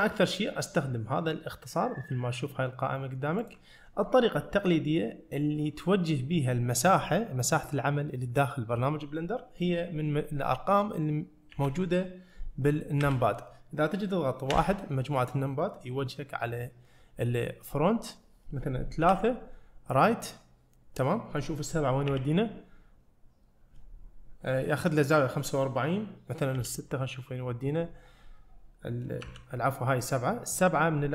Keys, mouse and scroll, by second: 11.6 KP_1, 13.1 KP_3, 14.6 KP_1, 19.1 KP_3, 22.1 KP_4, 26.6 KP_6, 29.3 KP_7.